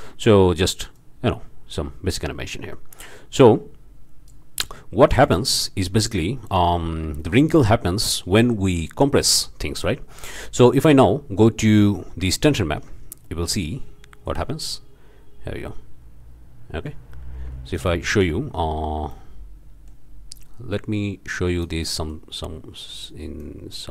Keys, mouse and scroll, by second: 0.9-4.4 drag, 5.2 shift+Left, 6.2-6.7 drag, 6.8 scroll up 2, 7.2-7.6 shift+drag, 10.5 scroll up 2, 10.8 click, 11.4 scroll up 2, 11.8-12.2 drag, 12.5 ctrl+shift+drag, 13.2-13.8 ctrl+shift+drag, 14.4-17.2 drag, 17.7 ctrl+shift+click, 18.6 ctrl+shift+middle click, 20.3-21.8 drag, 22.0 click, 22.8 click, 23.4 click.